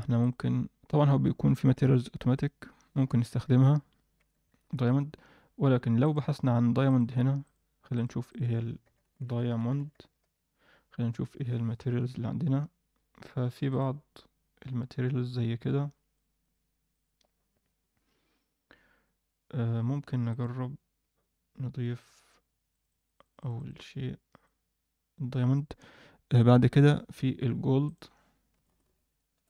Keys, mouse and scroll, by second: 3.0-3.3 scroll up 1, 4.5 ctrl+s, 4.5-5.2 scroll up 4, 6.0 click, 6.8 click, 7.4-10.2 drag, 16.1 click, 23.3 click, 23.5 click, 27.8-29.3 drag.